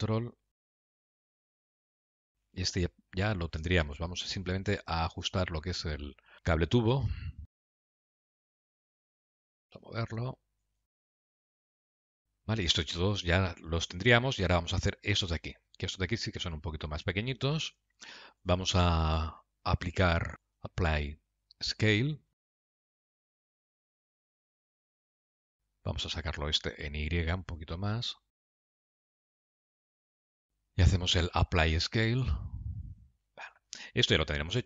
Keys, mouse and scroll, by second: 2.7-3.5 scroll down 3, 3.0 middle click, 4.3 KP_Decimal, 5.3-6.7 scroll down 7, 6.7 click, 7.8 Tab, 8.7 click, 8.9 g, 10.8 click, 11.0 g, 11.8 scroll down 8, 12.1 middle click, 16.0 scroll down 1, 16.3 scroll up 2, 17.0 scroll up 2, 17.2 shift+middle click, 18.0 Tab, 18.7 click, 21.0 click, 23.1 click, 23.9 click, 25.1 middle click, 25.4 click, 26.8 g, 31.3 click, 33.7 scroll down 1, 34.0 middle click.